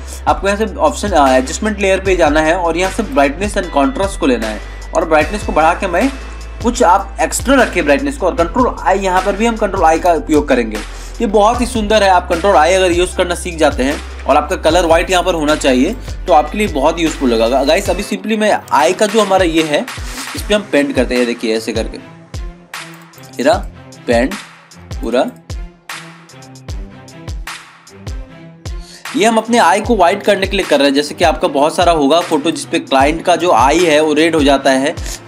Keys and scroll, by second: 10.1 ctrl+i, 11.1 ctrl+=, 19.2 ctrl+=.